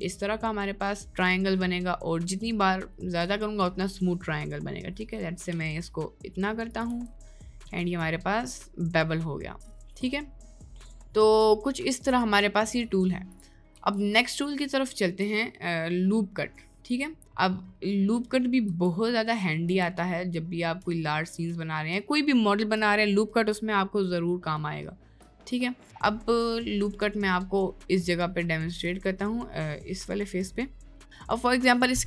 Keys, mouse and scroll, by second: 6.9 Tab, 7.4 middle click, 7.9 click, 8.7-11.1 middle drag, 11.6-12.2 shift+middle drag, 12.7 middle drag, 13.7 Tab, 16.9 middle click, 17.5 middle click, 18.7 Tab, 19.1-19.5 middle drag, 19.8 Tab, 20.1 middle click, 20.5 middle click, 21.1 middle click, 21.5 middle click, 22.3-23.4 middle drag, 24.6 shift+middle click, 25.5 middle click, 26.7 middle click, 27.3 shift+middle click, 27.8 middle click, 28.7 shift+middle click, 29.1 middle click, 30.4 middle click, 30.9 middle click.